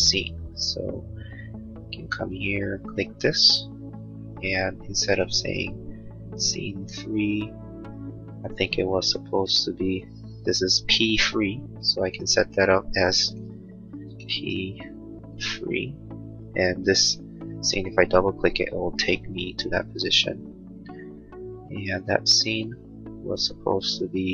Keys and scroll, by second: 13.5 BackSpace, 15.4 Return.